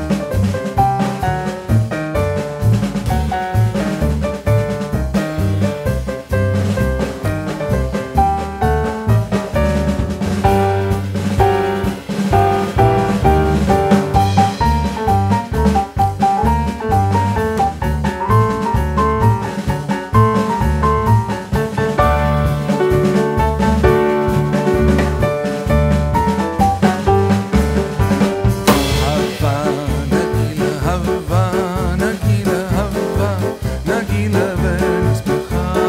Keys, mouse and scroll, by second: 0.6 click, 1.4 click, 2.9 middle click, 4.3 click, 4.8 middle click, 5.2 click, 5.8 click, 9.6 click, 10.7 click, 11.2 middle click, 11.6 click, 12.6 click, 13.0 middle click, 13.7 ctrl+z, 14.4 click, 14.7 shift+middle click, 15.8 click, 16.4 shift+middle click, 17.8 s, 22.8-23.2 scroll up 2, 23.2 click, 23.7 middle click, 24.5 click, 25.4 click, 27.0 Tab, 27.2 click, 28.7 click, 30.4 middle click, 32.2 shift+middle click, 32.3 middle click, 33.6 click, 34.2 middle click, 34.6 click, 35.0 Tab, 35.2 click, 35.4 middle click.